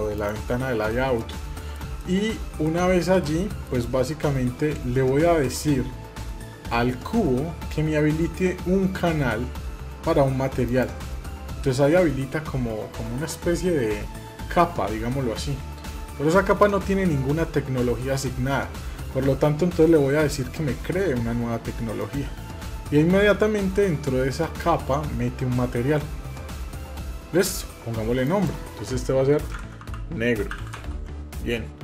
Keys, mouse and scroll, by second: 0.7 middle click, 1.3 shift+middle drag, 1.8-2.4 middle drag, 2.6 scroll down 1, 3.0 middle click, 3.7 Tab, 10.4 click, 21.7 click, 28.0-31.8 drag.